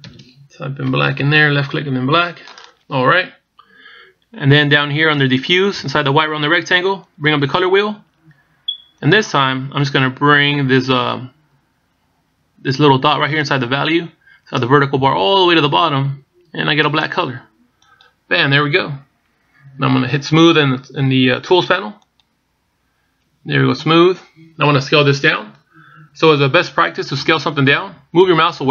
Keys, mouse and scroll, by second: 7.8 click, 9.8 click, 22.7 click.